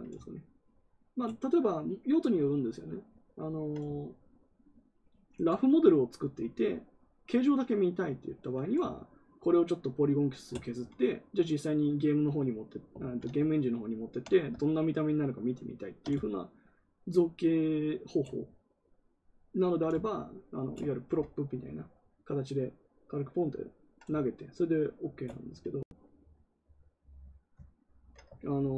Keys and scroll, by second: 12.9 ctrl+z.